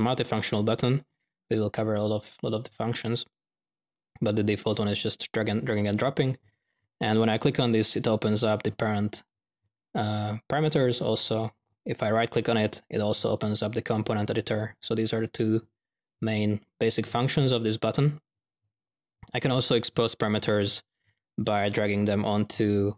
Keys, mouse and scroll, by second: 2.4-3.4 drag, 5.5 click, 7.5 click, 8.5-9.0 drag, 19.6-20.2 drag, 20.5-20.8 drag, 21.7 drag, 22.3 click.